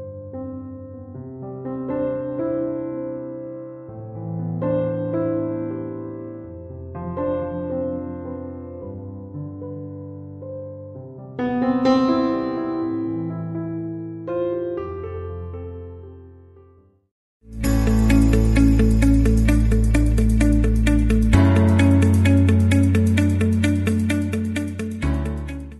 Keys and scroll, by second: 11.5 ctrl+7.